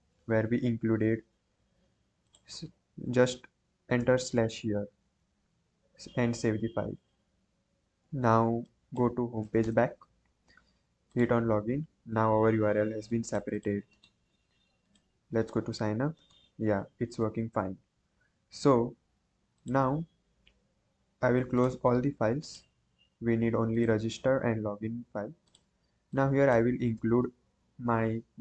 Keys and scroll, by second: 0.6 ctrl+j, 4.0 /, 4.3 ctrl+s, 26.9 BackSpace.